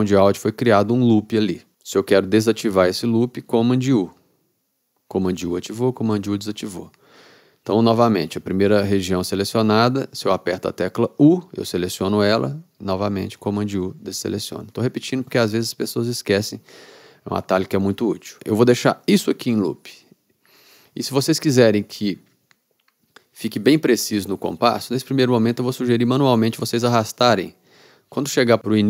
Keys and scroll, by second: 4.1 super+u, 5.5 super+u, 11.3 u, 13.3 super+u, 19.1 u.